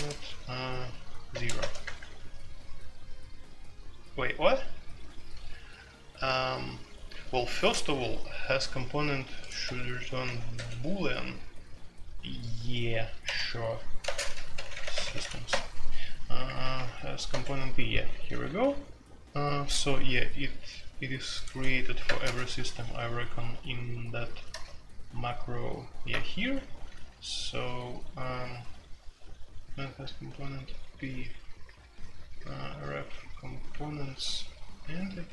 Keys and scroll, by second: 0.0-0.1 typing, 1.3-2.0 typing, 9.6 Escape, 10.2 typing, 13.2-15.1 typing, 15.4 Return, 16.3-19.0 typing, 17.3 Escape, 21.5 Escape, 22.2 alt+n, 24.5 alt+n, 26.7-28.4 typing, 31.1-35.3 typing.